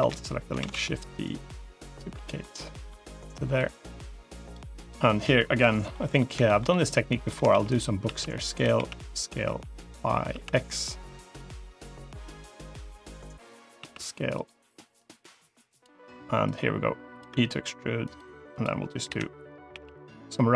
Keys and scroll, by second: 0.4 shift+d, 7.4 shift+d, 7.9 s, 8.6 s, 13.7 s, 17.1 e, 18.9 l, 19.6 g.